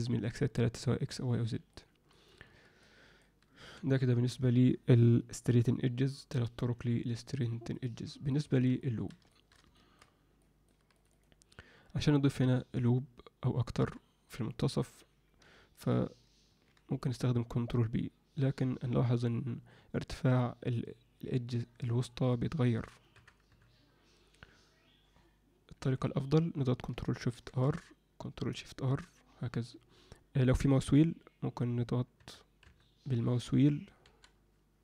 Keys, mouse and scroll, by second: 1.7 alt+middle click, 2.8 alt+middle click, 3.7 Tab, 7.3 click, 7.7 click, 8.2 click, 8.4 Tab, 8.8 alt+middle click, 9.3 alt+shift+middle click, 9.7 ctrl+alt+middle click, 10.4 alt+middle click, 11.0 click, 11.1 click, 16.4 ctrl+b, 27.3 ctrl+shift+r.